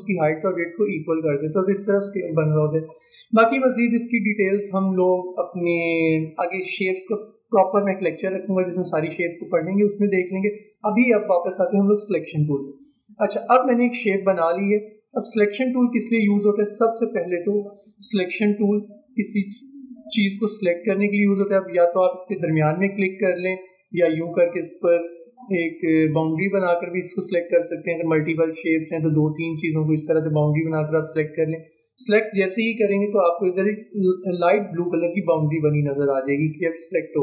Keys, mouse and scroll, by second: 15.4-29.8 drag, 29.8-33.0 drag, 33.0-33.4 alt+scroll up 1.